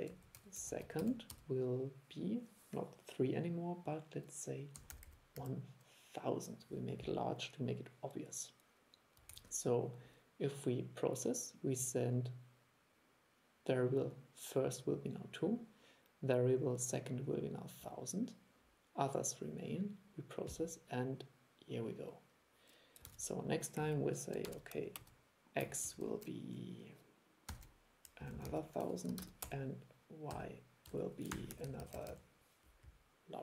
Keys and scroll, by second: 9.4 super+e, 23.2 super+e.